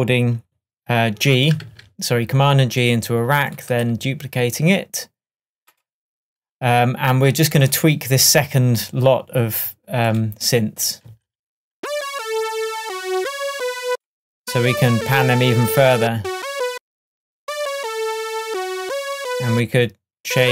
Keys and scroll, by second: 1.7 super+g, 11.1 space.